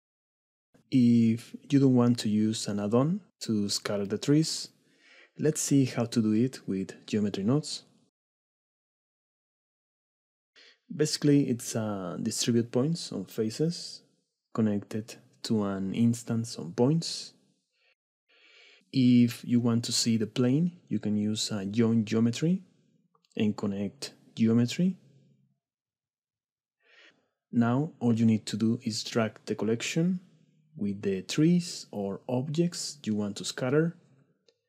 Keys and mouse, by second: 6.0-10.5 drag, 11.5 middle click, 12.6 middle click, 13.2 click, 13.7-15.7 drag, 16.2 click, 16.5 click, 19.4-21.3 drag, 22.3 click, 22.5-24.4 drag, 26.5-26.9 drag, 27.8 middle click, 27.9 click, 33.5 click, 34.3 click.